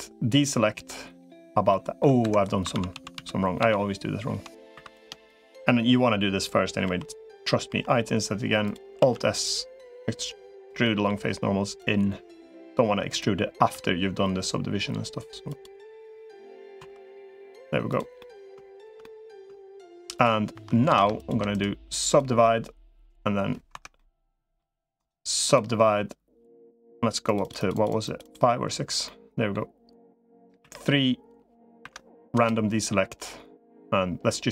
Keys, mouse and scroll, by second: 1.5 middle click, 2.1 Escape, 2.5 ctrl+z, 2.7 ctrl+z, 3.1 ctrl+z, 3.5 ctrl+z, 4.7 click, 4.7 3, 6.7 i, 8.9 alt+s, 10.6 middle click, 11.7-13.1 drag, 13.5 g, 15.6 middle click, 16.7 2, 16.9 middle click, 17.7 click, 18.0 middle click, 18.5 shift+click, 18.8 middle click, 19.5 shift+click, 20.7 ctrl+z, 21.3 right click, 22.9 right click, 23.5 Escape, 23.7 middle click, 24.9 right click, 27.1 click, 27.5 click, 28.8 middle click, 30.5 3, 31.7 F3.